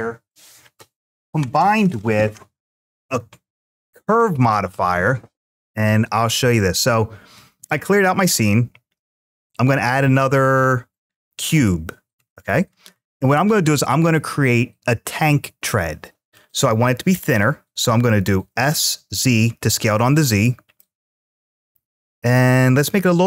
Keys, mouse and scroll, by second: 12.1-12.7 scroll up 4, 18.6 z, 20.1 click, 20.6-21.6 middle drag.